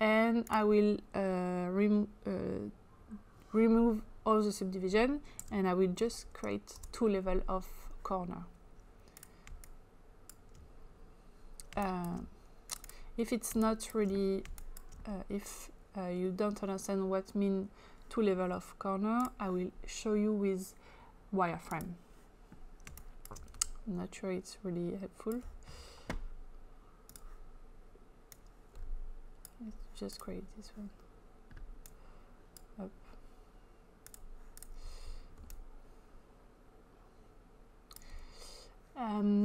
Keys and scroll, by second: 5.4 2, 6.8 Return, 9.5 space, 11.8 space, 15.1 space, 22.9 space.